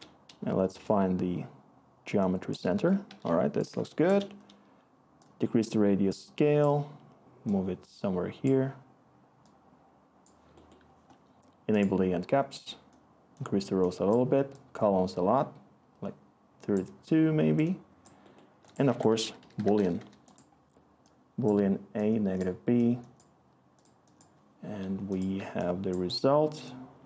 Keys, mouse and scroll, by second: 3.0 1, 18.8-19.9 typing, 19.9 Return.